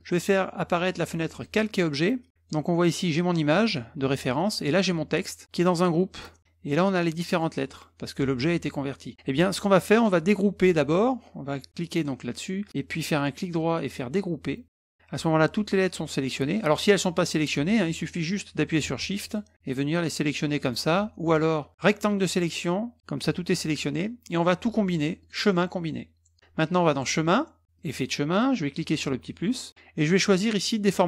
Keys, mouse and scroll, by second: 0.0 click, 1.4 click, 2.3 click, 3.0 click, 4.7 click, 5.7 click, 6.7 click, 7.3 click, 7.7 click, 8.0 click, 9.9 click, 13.2 right click, 14.6 click, 17.0 click, 19.2 shift+click, 19.7 shift+click, 20.2 shift+click, 20.6 shift+click, 21.2 click, 21.6 click, 25.2 click, 26.9 click, 27.8 click, 28.8 click.